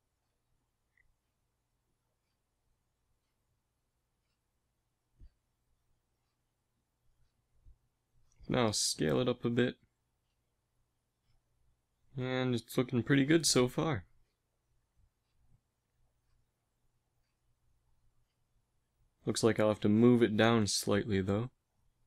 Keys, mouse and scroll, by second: 0.7 Tab, 3.6 a, 7.1 Tab, 8.4 a, 8.4 s, 11.0 Tab, 11.3 a, 11.7 a, 12.0 ctrl+s, 14.8 KP_1, 20.8 g.